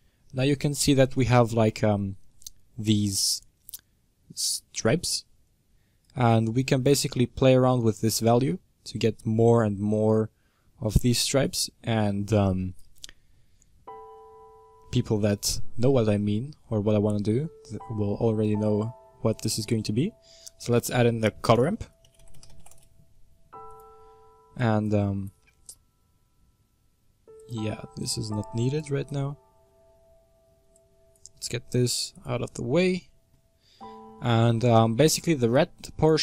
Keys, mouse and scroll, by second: 0.2-0.7 scroll up 1, 0.7-6.4 middle drag, 6.4-10.6 drag, 12.4 click, 14.0-23.6 middle drag, 24.5 click, 25.0-27.3 middle drag, 27.3 click, 27.6 x, 28.8 click, 30.0-31.3 scroll down 11, 35.6-36.2 drag.